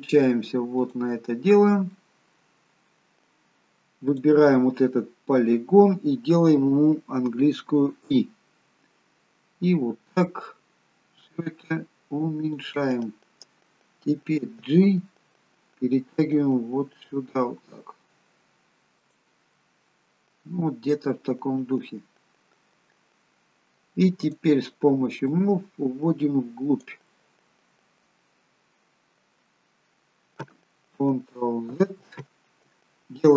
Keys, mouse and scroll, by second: 0.8 click, 1.9 middle click, 4.1 click, 14.4 g, 19.6 middle click, 24.3 click, 25.3 click, 27.2 middle click, 29.6 middle click, 31.8 ctrl+z.